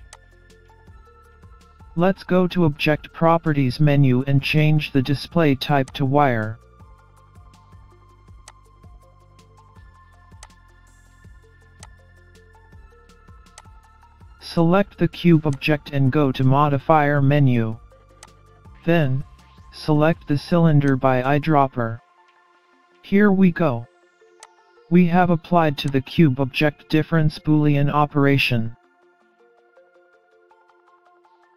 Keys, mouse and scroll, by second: 1.1 s, 4.8 middle click, 9.2 click, 10.1-10.9 scroll down 10, 11.8 click, 12.4-13.5 scroll down 8, 13.5 scroll down 3, 13.7 click, 16.9 click, 18.9 click, 21.5 click, 25.4-25.9 scroll up 3, 25.9 middle click, 27.7 click, 29.2 click.